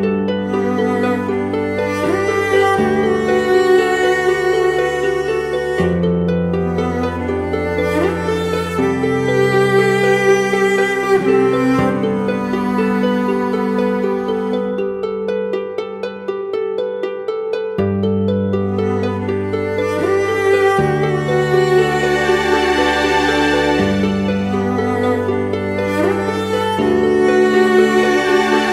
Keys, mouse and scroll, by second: 4.3 double click, 15.8 alt+click, 22.1 right click, 23.1 double click.